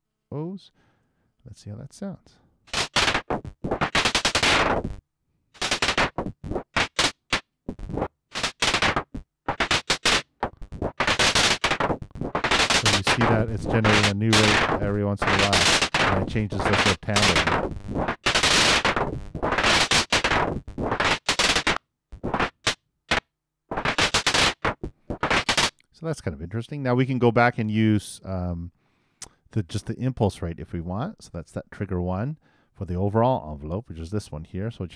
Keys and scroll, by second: 0.9 super+Return, 25.6 super+..